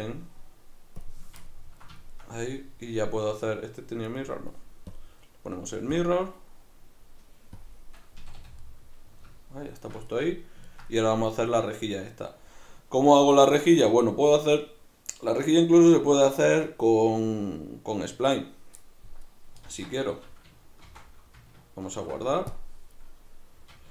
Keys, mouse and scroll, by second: 1.5-3.4 ctrl+middle drag, 3.4 right click, 4.1 right click, 4.9-8.6 drag, 8.2 a, 8.6-23.9 middle drag, 19.6 alt+q, 20.8 shift+c, 21.9 ctrl+s.